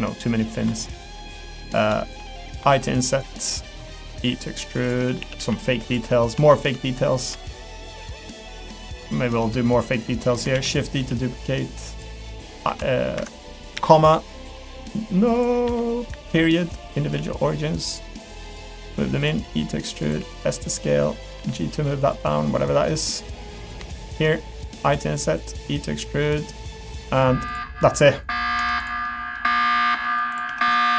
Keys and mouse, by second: 0.3 middle click, 0.6 3, 0.8 click, 1.2 click, 1.6 click, 2.6 1, 4.1 e, 5.2 a, 5.4 g, 6.1 middle click, 6.4 shift+middle click, 6.8 middle click, 7.3 3, 8.8 shift+click, 9.0 middle click, 10.2 middle click, 10.5 shift+d, 11.0 s, 12.7 i, 13.7 ,, 17.2 s, 18.4 middle click, 18.9 g, 19.3 e, 20.2 s, 21.4 g, 22.4 middle click, 22.9 middle click, 24.0 shift+click, 25.5 e, 26.8 click, 27.5 click, 29.0 Tab, 29.0 middle click, 29.6 middle click, 30.3 click.